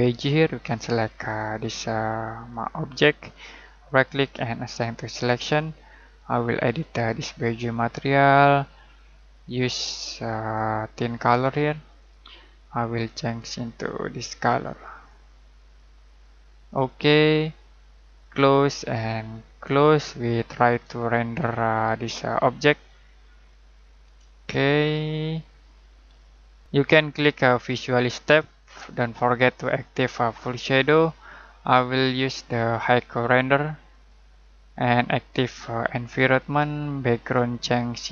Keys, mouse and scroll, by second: 1.2 click, 3.8 right click, 4.7 click, 9.7 click, 20.5-20.9 scroll down 1, 21.0 shift+middle click, 24.2 middle click, 24.8-25.4 scroll up 1, 25.4 middle click, 26.6 click, 27.9 click.